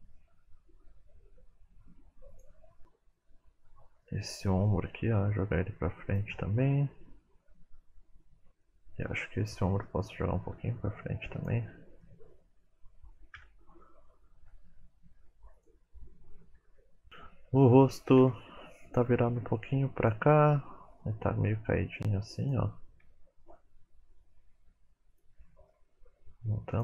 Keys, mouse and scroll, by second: 1.2 middle click, 1.3 r, 2.5 middle click, 2.7 click, 4.1 middle click, 5.1 r, 6.6 middle click, 8.3 click, 8.7 middle click, 9.4 click, 9.9 middle click, 10.5 r, 12.0 middle click, 12.7 KP_1, 13.8 click, 14.2 g, 16.5 shift+middle click, 16.7 scroll up 2, 17.1 click, 18.2 KP_7, 19.0 r, 20.6 middle click, 21.5 r, 23.0 KP_1, 24.5 r, 25.4 middle click, 26.1 r.